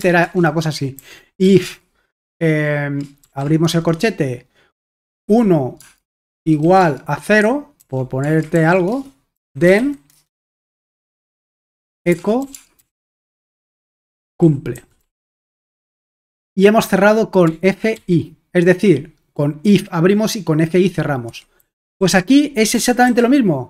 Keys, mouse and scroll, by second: 0.0 Return, 0.2 Return, 1.0-1.6 typing, 3.2-3.6 typing, 5.2-10.2 typing, 11.7-16.1 typing, 17.4-17.9 typing, 21.3 Escape, 21.6-23.6 typing.